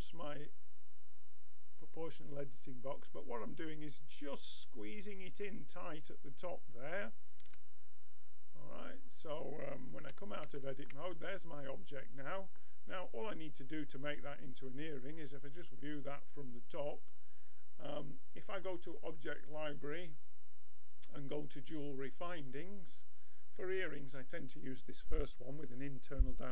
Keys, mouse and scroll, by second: 5.4-7.5 middle drag, 7.5 a, 7.9-11.0 middle drag, 10.1 Tab, 11.2 middle click, 13.8-15.7 drag, 16.5-18.3 middle drag, 18.6-20.6 drag.